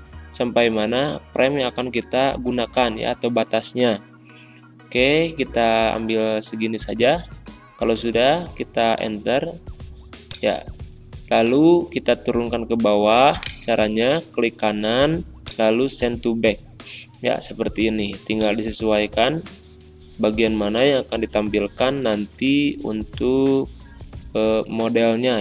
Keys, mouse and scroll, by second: 10.9 click, 13.3 right click, 13.7 typing, 15.3 click, 18.3-21.2 drag, 21.2 Up.